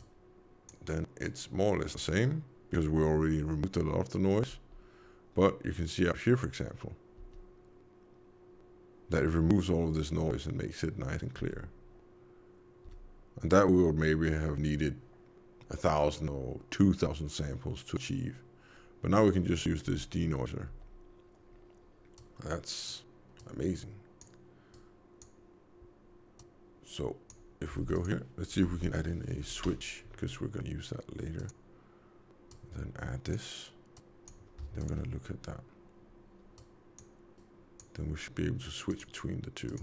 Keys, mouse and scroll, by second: 1.2 click, 4.5 m, 7.2 m, 11.3 m, 12.8 m, 19.8 m, 20.7 m, 22.1 click, 23.3 click, 26.3 click, 27.7 shift+a, 32.5 click, 33.9 click, 34.7 ctrl+shift+click, 36.5 click, 37.3 click, 39.6 click.